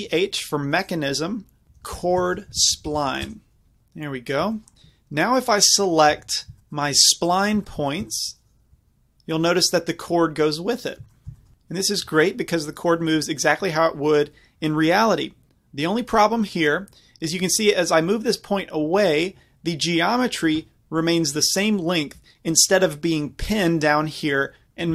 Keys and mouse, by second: 5.4-7.8 middle drag, 6.2 Tab, 7.8-11.4 drag, 8.8 g, 12.1 g, 19.1-20.7 middle drag.